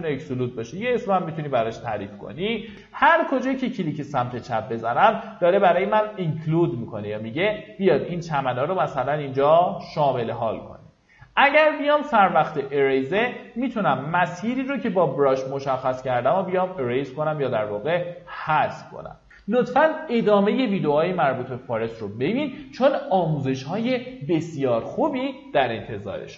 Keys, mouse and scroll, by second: 5.9 middle click, 7.4-17.6 drag.